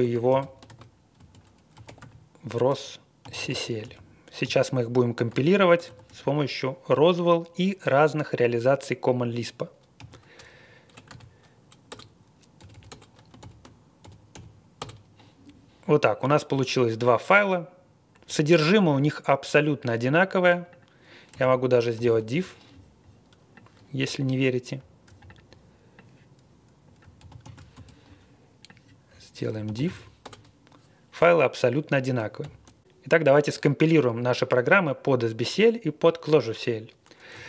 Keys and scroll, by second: 0.0-6.5 typing, 9.9-11.0 typing, 11.9 Return, 12.4-14.8 typing, 13.4 ctrl+l, 21.0-22.4 typing, 27.2 super+c, 27.4 super+v, 27.7 space, 29.6 super+c, 29.8 super+v, 30.2 Return, 32.4 ctrl+l, 37.1-37.4 typing.